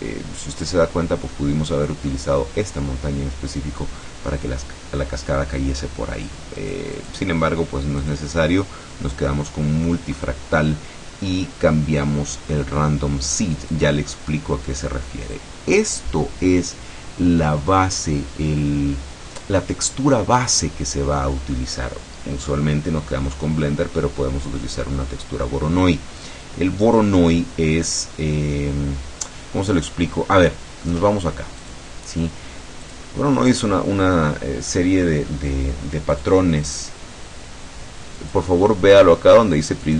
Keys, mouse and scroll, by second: 2.2-4.7 scroll up 1, 4.7-6.1 middle drag, 6.7 click, 7.1 click, 8.1 click, 9.8 scroll down 1, 10.7-13.8 scroll down 1, 13.8 click, 26.3 click, 30.4 middle click, 31.7 click, 32.9 click, 36.2 click, 38.3 click, 39.9 click.